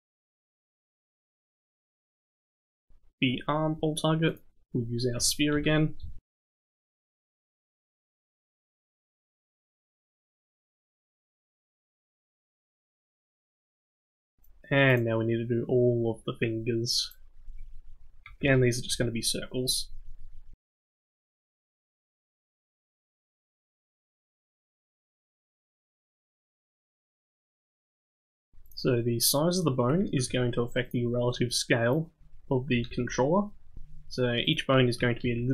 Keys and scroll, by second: 4.1 e.